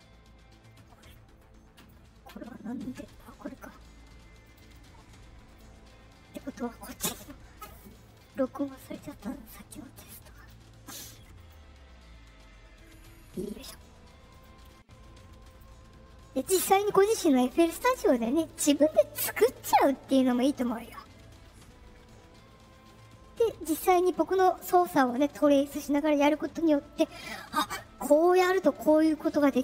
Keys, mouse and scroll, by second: 1.7 click, 3.4 right click, 4.4 click, 5.4 click, 6.7 click, 8.1 click, 9.0 right click, 10.3 click, 11.3 click, 13.5 click, 14.3 click, 15.4 click.